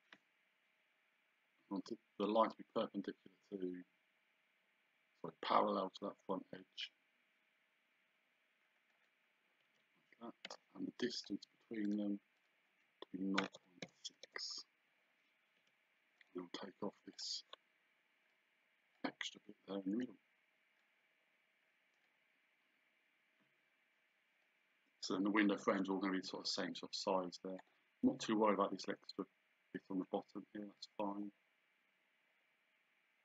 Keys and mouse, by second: 8.9 click, 9.7 Escape, 10.5 d, 11.2 click, 13.4 KP_0, 15.7 Escape, 16.2 right click, 17.2 click, 18.3 click, 21.0 click, 25.0 click, 26.6 click, 30.8 click.